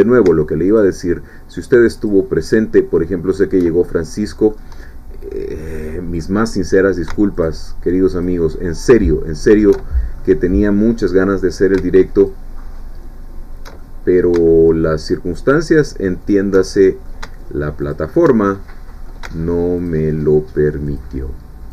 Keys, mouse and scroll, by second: 0.8 alt+shift+click, 2.0 alt+shift+click, 3.4 alt+shift+click, 3.8 alt+shift+middle click, 4.9-5.2 shift+scroll down 1, 5.3-6.3 middle drag, 8.2-9.4 alt+shift+drag, 9.7 alt+shift+middle click, 10.9-11.7 scroll up 1, 12.2 alt+shift+click, 13.8 alt+shift+middle click, 15.1-16.5 alt+shift+drag, 16.6 alt+shift+middle click, 17.8 click, 18.4 alt+shift+middle click, 19.9 alt+shift+click, 20.9 alt+shift+click.